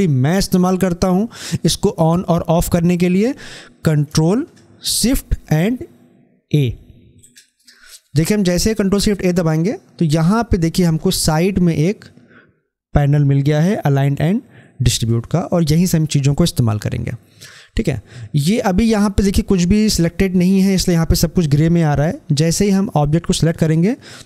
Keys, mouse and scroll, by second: 3.9 click.